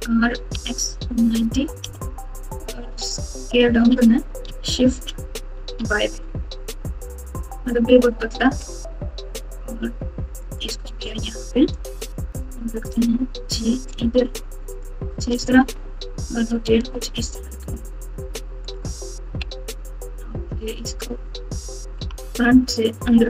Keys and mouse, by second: 3.7 s, 11.0 Tab, 11.6 Tab, 12.9 g, 15.3 r, 16.8 g, 19.2 KP_1, 21.0 KP_9, 22.0 KP_3, 22.2 KP_9.